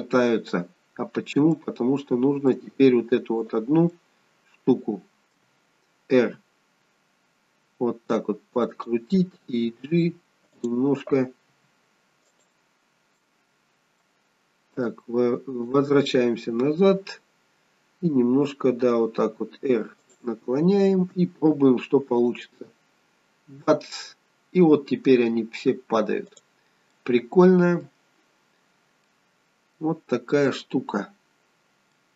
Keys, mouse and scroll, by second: 0.3 scroll up 2, 1.4 shift+middle click, 1.4 shift+scroll up 1, 3.3 click, 3.8 middle click, 6.1 r, 9.6 g, 11.5 r, 13.2 middle click, 14.8 click, 19.2 r, 22.1 click, 26.2 click, 26.8 middle click, 28.9 middle click, 31.9 middle click.